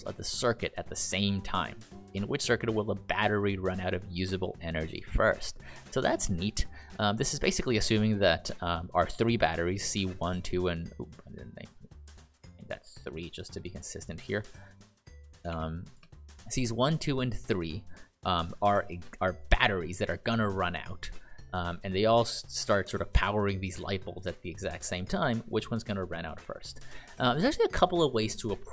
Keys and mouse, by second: 6.6 click, 15.4 typing, 15.9 Return, 17.3 click, 18.5 ctrl+click.